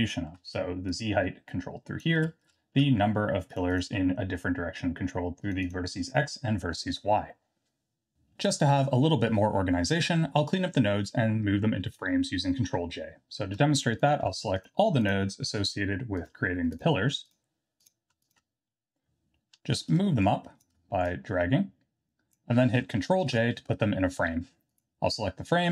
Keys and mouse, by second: 0.9-2.0 shift+drag, 3.7 click, 5.4 click, 5.6 click, 14.6 shift+click, 16.2 shift+click, 17.2 shift+click, 20.2-20.6 shift+drag, 21.1-22.4 drag, 23.2 ctrl+j, 24.7 click.